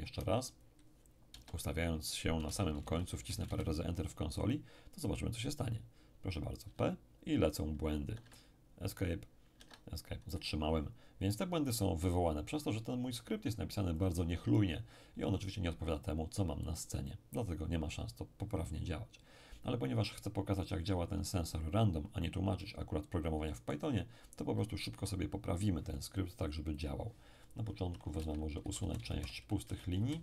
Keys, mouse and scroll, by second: 0.1 space, 1.3 BackSpace, 2.6 Return, 2.8 Return, 6.6 p, 8.1 Escape, 9.6 Escape, 14.0 click, 21.4-22.6 scroll up 1, 22.6-24.6 middle drag, 24.9 n, 26.8 click, 28.2 Delete, 28.6 Down, 28.8 Down, 29.0 Down, 29.6 shift+Delete, 30.0 shift+Down.